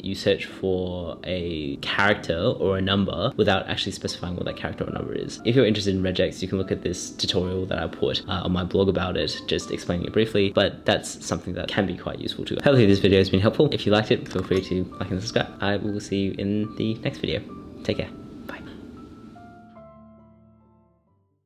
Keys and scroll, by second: 5.3 shift+8, 6.2 shift+BackSpace.